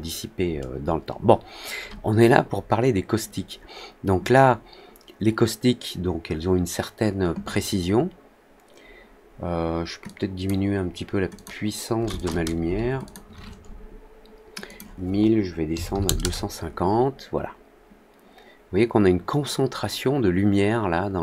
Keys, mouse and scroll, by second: 0.3-0.9 scroll down 2, 1.8 scroll down 1, 10.0-10.4 drag, 11.3 click, 12.1 click, 13.0 click, 14.6 click.